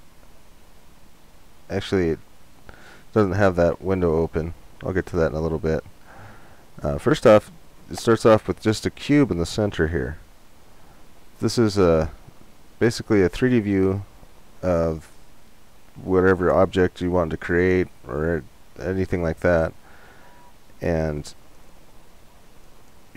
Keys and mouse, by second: 0.6-2.6 drag, 2.2 n, 22.2-23.1 drag.